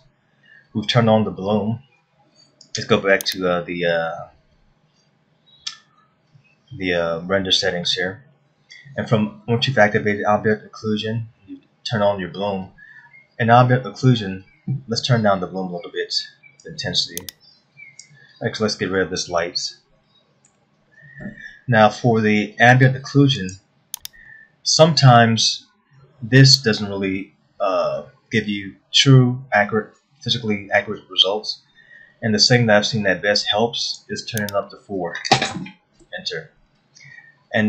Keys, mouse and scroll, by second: 5.7-7.3 scroll up 7, 17.4 click, 18.4 click, 21.0 Delete, 23.9 click, 24.9 middle click, 34.5 click.